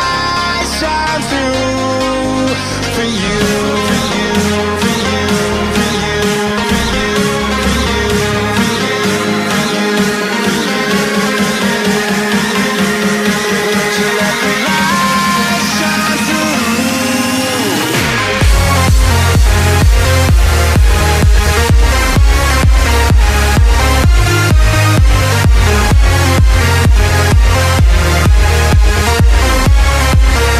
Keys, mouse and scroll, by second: 0.5-3.0 drag, 3.0 KP_7, 3.8-5.1 scroll down 7, 5.1-6.2 scroll down 6, 6.3 s, 12.8-13.3 scroll down 2, 13.3 shift+middle click, 13.7-15.0 scroll up 7, 15.0-18.4 drag, 18.4 shift+middle click, 19.2-20.8 scroll up 9, 20.8 s, 28.1 click, 29.6-30.5 drag.